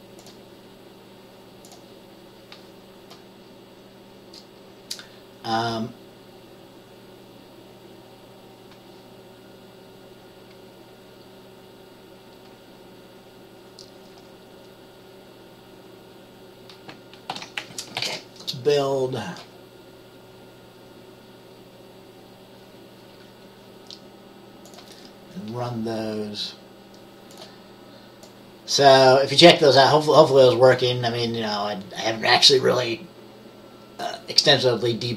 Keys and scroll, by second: 17.4 ctrl+s.